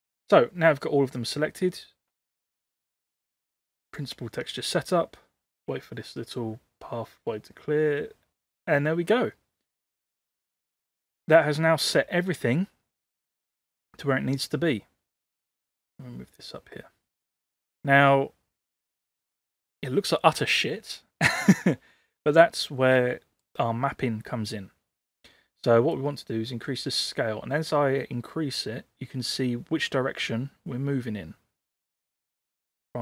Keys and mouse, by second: 11.0 click, 15.5-17.4 drag, 23.2 middle click, 25.9-32.6 drag.